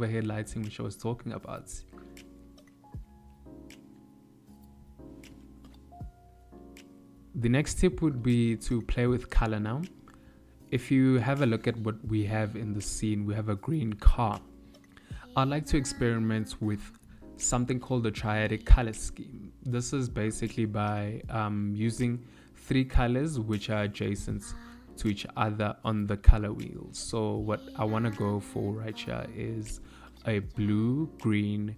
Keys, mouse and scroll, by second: 2.5 middle click, 4.9 middle click, 8.7 click, 17.0 middle click, 21.9 KP_1, 22.7 KP_3, 24.5 ctrl+middle click, 25.9 shift+middle click, 27.7 shift+s, 29.2 shift+a.